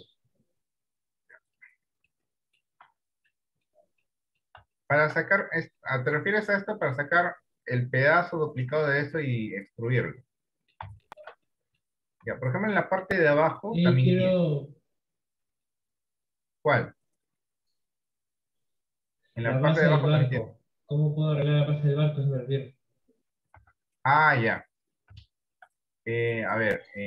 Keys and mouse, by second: 0.1 Tab, 1.5 click, 2.3 middle click, 3.0 Tab, 3.4 middle click, 4.1 middle click, 4.8 shift+middle click, 6.3 middle click, 7.4-9.3 middle drag, 9.6-11.1 middle drag, 11.2 shift+middle click, 11.6 middle click, 12.4 Tab, 13.2 middle click, 13.7 middle click, 14.6 middle click, 15.3 middle click, 19.6 middle click, 20.6 middle click, 23.8 Tab, 24.4 middle click, 25.4 shift+middle click.